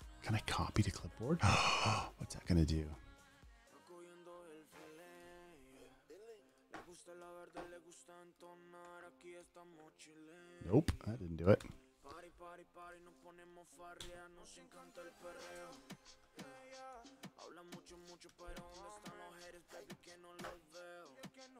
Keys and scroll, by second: 7.8 super+v, 10.0 super+v, 11.9 super+BackSpace, 14.5 BackSpace, 17.4 super+v, 18.6 BackSpace, 20.5 super+a.